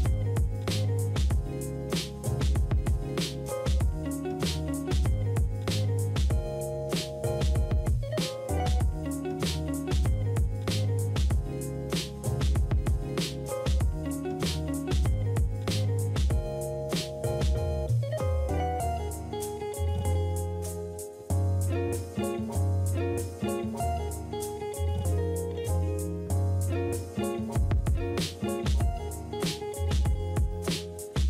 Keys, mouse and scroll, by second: 7.4-8.3 typing, 26.9 space, 28.8 space, 29.8 right click.